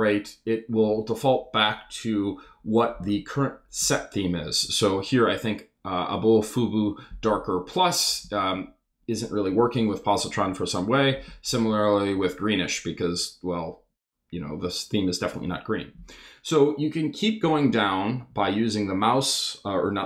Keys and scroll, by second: 8.2 Down, 9.6 Down, 15.2 Down, 17.4 Down.